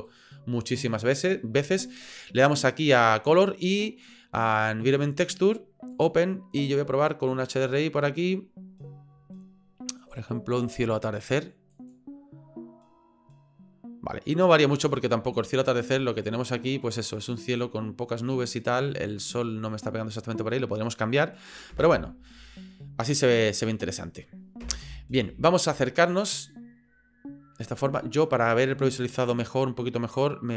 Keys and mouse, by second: 0.0-1.9 drag, 2.9-5.0 drag, 5.9 click, 16.9-20.4 middle drag, 21.7 KP_0, 24.6 KP_0, 29.2 click.